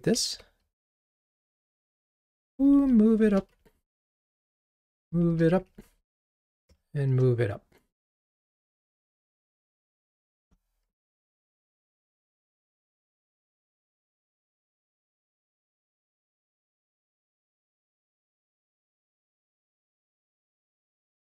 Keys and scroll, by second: 2.4 alt+shift+Up, 9.9 alt+shift+Up, 12.0 ctrl+r.